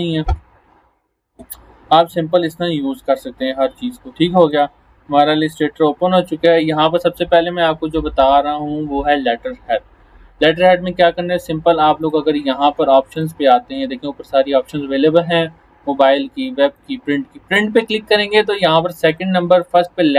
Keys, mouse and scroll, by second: 0.7 scroll down 1, 4.5 click, 12.7 click, 16.8 click, 19.1 click.